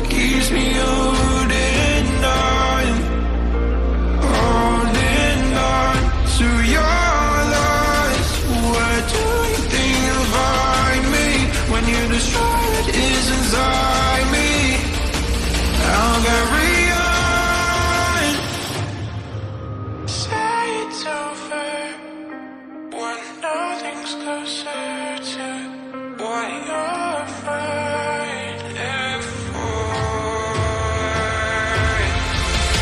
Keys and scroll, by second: 4.9 ctrl+g, 9.9 ctrl+e, 11.7 ctrl+e, 20.6 ctrl+j, 20.6 ctrl+alt+z, 22.3 ctrl+alt+z, 23.8 ctrl+alt+z, 29.3 ctrl+j, 32.2 ctrl+z.